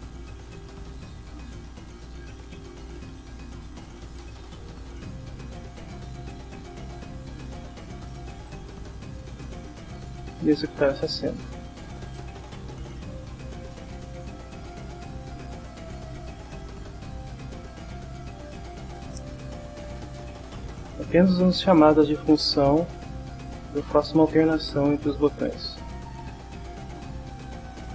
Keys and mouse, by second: 0.0-3.8 typing, 1.3 Return, 3.8 Return, 4.8 Down, 5.2 Return, 6.1-7.4 typing, 7.6 Return, 9.3 click, 12.0 click, 14.3 click, 15.7 click, 17.3 click, 18.8 click, 20.1 click, 22.8 click, 24.3 click, 25.4 click, 26.1 click, 27.4 click.